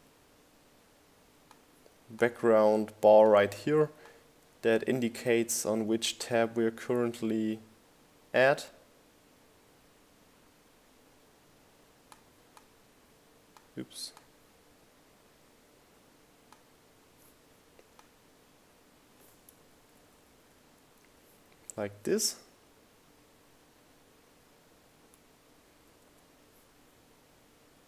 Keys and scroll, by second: 20.3 Up, 21.4 Down.